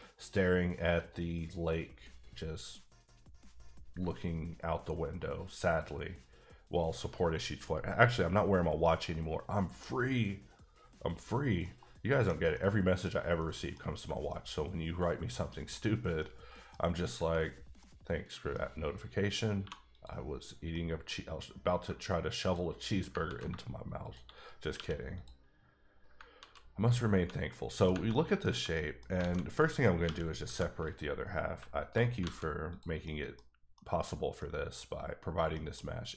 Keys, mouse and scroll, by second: 11.6 l, 11.7 middle click, 12.5 scroll up 1, 12.5 middle click, 13.0-13.4 scroll down 2, 13.4 middle click, 14.3 middle click, 15.8-16.2 scroll up 2, 16.2 middle click, 17.8 middle click, 19.6 2, 20.2 click, 20.7 middle click, 21.3 scroll up 1, 22.4 shift+click, 23.2 ctrl+z, 24.0 shift+click, 24.7 q, 25.1 click, 26.3 ctrl+z, 27.1-27.5 scroll down 2, 27.5 middle click, 28.1 middle click, 28.7 middle click, 29.2 alt+a, 30.0 l, 30.8 click, 31.8 Tab, 32.2 alt+a, 32.7 click, 33.0 middle click, 33.7 middle click, 34.4 middle click, 34.8-35.5 scroll down 2, 35.5 middle click.